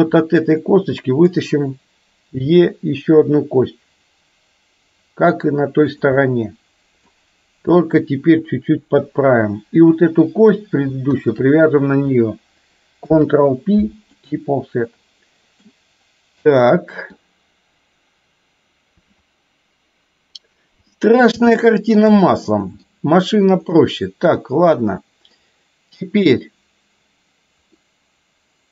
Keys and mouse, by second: 0.7 middle click, 2.4 e, 6.3 middle click, 8.1-9.3 drag, 11.3 shift+click, 13.2 ctrl+p, 14.9 middle click, 16.7 middle click, 20.9 middle click, 21.7 shift+middle click, 22.3 middle click, 23.8-25.4 middle drag, 27.8-28.7 middle drag.